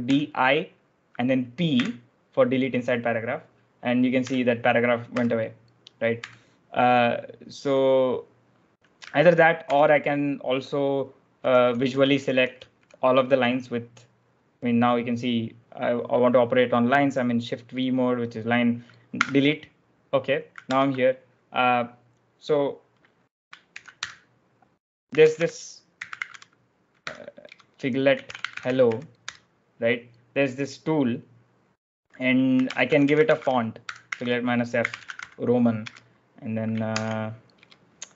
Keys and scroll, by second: 1.6 p, 4.1-6.0 typing, 9.5 shift+v, 11.3-12.7 typing, 19.0 d, 20.6 0, 23.6-29.2 typing, 32.1-35.7 typing, 36.8-38.1 typing.